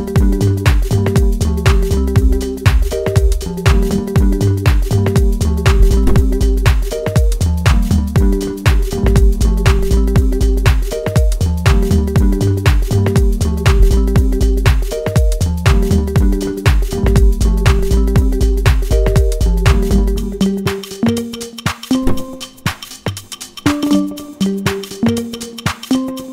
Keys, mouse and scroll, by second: 1.2-3.8 right drag, 3.8 click, 6.9 scroll down 1, 11.1-12.9 scroll up 1, 13.6 click, 18.9 click, 20.0-21.4 middle drag, 21.4 scroll up 1, 22.0-23.6 shift+middle drag, 23.6 scroll down 1, 24.1 scroll up 1, 25.1 click.